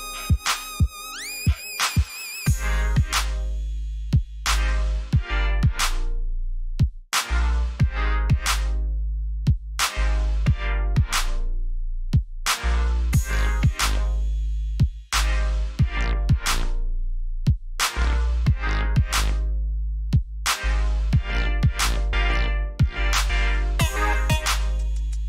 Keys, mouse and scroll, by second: 1.6 click, 5.9 alt+scroll up 1, 7.3 alt+scroll up 1, 8.1 alt+scroll down 1, 9.3 click, 15.0 click, 20.0 click.